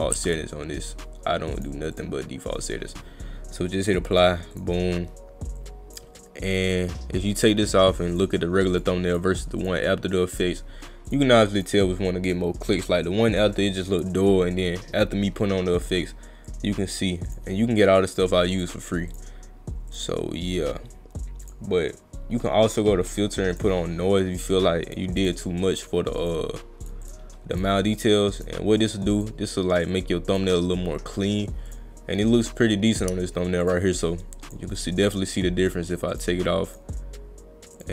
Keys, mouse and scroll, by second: 0.2 ctrl+z, 1.6 click, 2.0 click, 4.2 click, 4.5 click, 5.6 click, 7.4 click, 8.2 click, 8.7 click, 9.1 click, 9.6 click, 11.1 click, 11.6 click, 12.3 click, 14.5 click, 16.5 click, 18.6 click, 19.1 click, 19.9 click, 21.4 click, 23.6 click, 24.9 click, 25.2 click, 25.8 click, 26.2 click, 26.8 click, 27.0 click, 27.5 click, 28.0 click, 28.4 click, 29.2 click, 29.9 click, 31.7 click, 33.6 click, 34.5 click, 36.1 click, 36.7 click, 37.8 click.